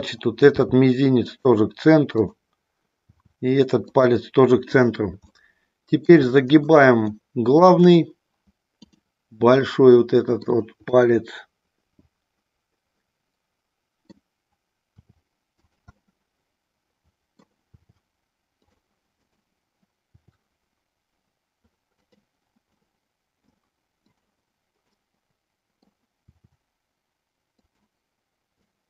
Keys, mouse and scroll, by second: 0.5 r, 2.9 r, 5.3 middle click, 6.5 shift+middle click, 7.0 shift+middle click, 9.5 middle click, 10.9-14.1 middle drag, 14.9 r, 15.9-17.5 middle drag, 17.8 r, 19.3 click, 20.2 r, 21.9 click, 22.6 middle click, 24.0 click, 24.8-25.9 middle drag, 26.2 r, 27.5 click, 28.7 middle click.